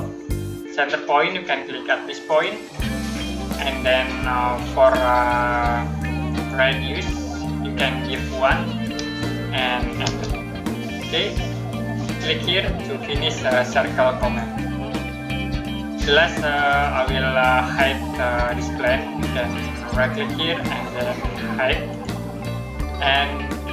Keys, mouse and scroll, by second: 2.1 click, 6.2 click, 8.6 1, 9.9 Return, 16.3 click, 19.8 right click, 21.8 click.